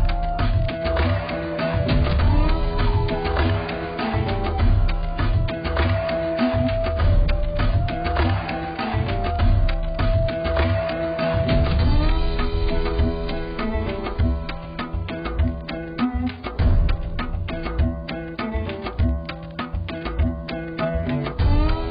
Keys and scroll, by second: 13.2 ctrl+i.